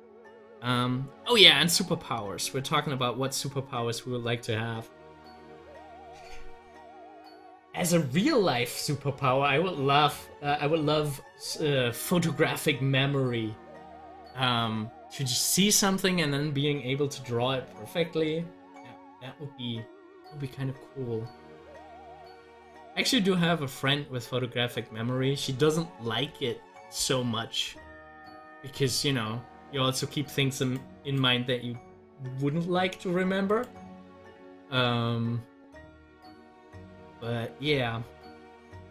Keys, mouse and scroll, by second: 23.2 scroll up 1, 30.6 click, 33.5 click, 38.8-38.9 scroll down 1.